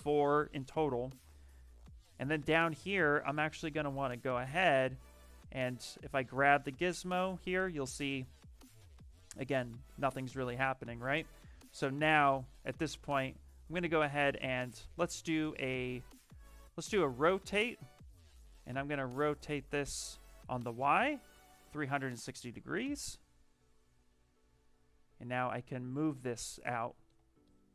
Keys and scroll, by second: 10.7 ctrl+z.